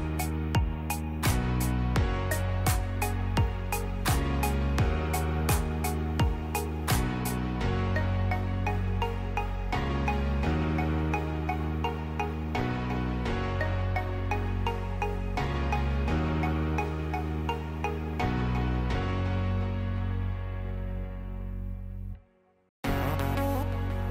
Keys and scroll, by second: 7.6 ctrl+z, 17.2 space.